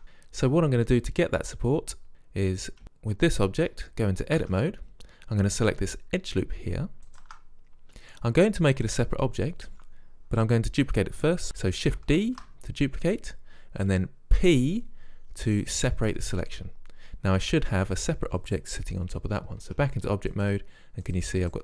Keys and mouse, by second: 2.1 right click, 4.5 Tab, 7.2 right click, 9.0 middle click, 12.3 shift+d, 14.6 p, 19.7 Tab.